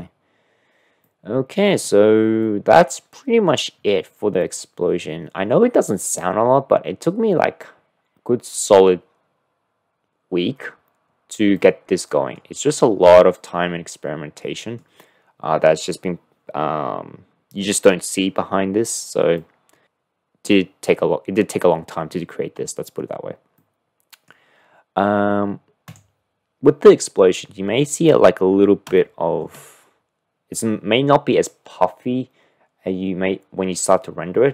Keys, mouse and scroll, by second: 0.0 click, 1.1-1.9 middle drag, 2.5-3.5 middle drag, 4.5 click, 11.5-12.1 drag, 12.1 middle click, 13.5-14.0 middle drag, 14.0 click, 19.5 middle click, 23.6-24.1 middle drag, 24.1 click, 25.9 click, 29.0 shift+middle click.